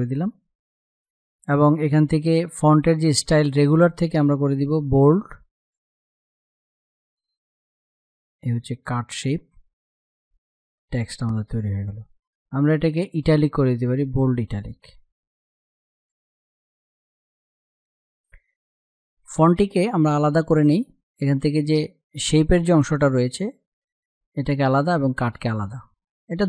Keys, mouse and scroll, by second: 2.9 click, 5.7-17.4 drag, 19.4 click, 23.2 space, 23.4 click.